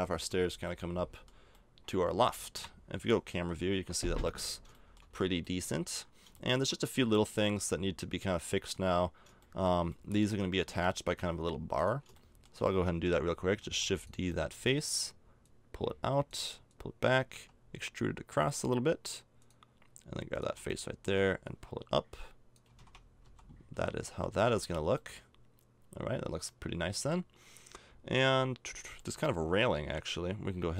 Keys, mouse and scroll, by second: 0.3 middle click, 0.3 z, 2.5 KP_0, 3.3 a, 4.3 middle click, 7.3-8.6 middle drag, 9.6 middle click, 10.3 right click, 10.6 Tab, 13.6 shift+d, 17.3 e, 20.3 right click, 20.7-22.7 drag, 21.4-22.5 right drag, 22.7-24.4 typing, 22.8 Tab, 24.6 Tab, 28.9-30.7 middle drag.